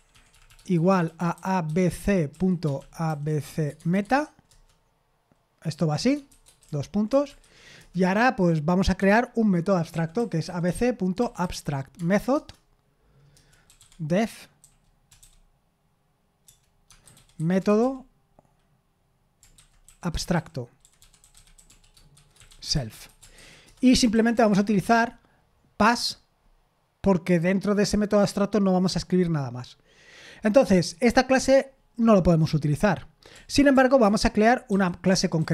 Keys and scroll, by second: 3.8 shift+Tab, 3.8 typing, 4.5 Left, 23.8-24.5 typing.